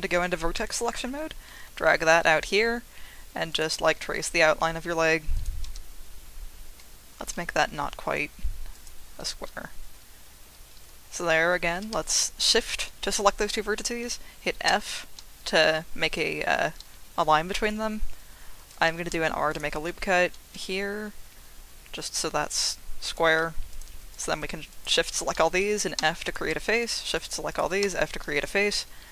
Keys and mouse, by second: 1.6 e, 3.5 click, 3.9 e, 5.3 click, 5.6 e, 6.7 e, 8.7 click, 12.0 shift+click, 14.7 f, 19.0 ctrl+r, 20.5 g, 23.1 click, 23.7 shift+click, 24.1 shift+click, 26.0 f, 27.1 shift+click, 27.8 f.